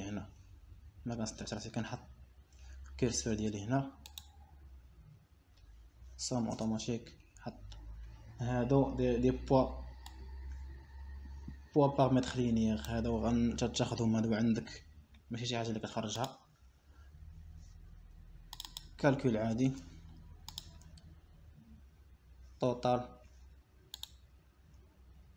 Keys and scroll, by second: 9.1 Return, 22.2 Return.